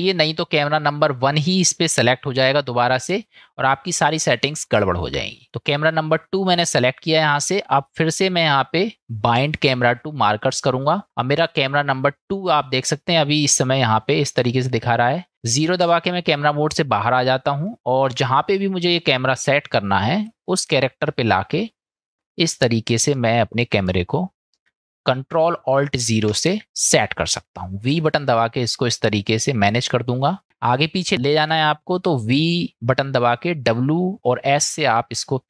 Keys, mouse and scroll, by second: 7.8-10.6 drag, 15.8 KP_0, 18.4-18.8 shift+middle drag, 19.2-19.7 middle drag, 20.5 shift+middle click, 21.7-22.2 middle drag, 23.1-23.6 middle drag, 23.9-24.6 shift+middle drag, 26.3 ctrl+alt+KP_0, 27.9 v, 30.3 click, 35.3-35.4 s.